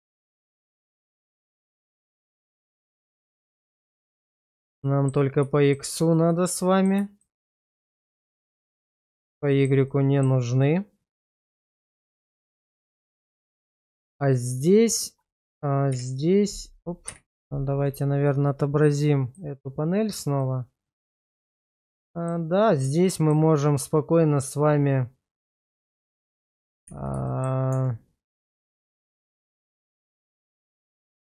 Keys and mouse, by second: 1.8 click, 3.8 click, 4.8 middle drag, 5.6 shift+middle click, 6.2 middle click, 7.2 shift+middle drag, 8.1-9.1 middle drag, 9.5 shift+middle click, 9.9-10.3 middle drag, 10.6-12.3 middle drag, 12.8 shift+middle drag, 13.7-14.1 middle drag, 14.8 shift+middle click, 16.0 /, 17.1 /, 20.4-22.3 middle drag, 23.1 shift+middle click, 25.8 shift+middle click, 27.0 shift+z, 27.3 middle click, 27.7 Tab, 28.7 shift+middle click, 29.8 shift+z, 30.3 middle click.